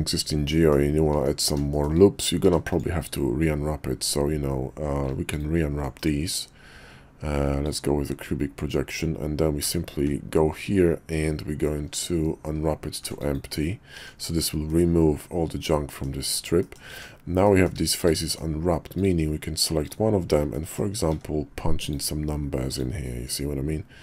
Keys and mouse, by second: 0.5 middle click, 1.1 Tab, 1.7 shift+middle click, 2.4 a, 2.8-4.7 drag, 5.3 alt+click, 5.9-7.8 drag, 9.6 d, 13.9 Tab, 14.7-16.0 middle drag, 16.6 click, 16.9 Tab, 17.5 middle click, 18.2 middle click, 18.9 click, 19.8 click, 20.5 middle click, 21.1 d.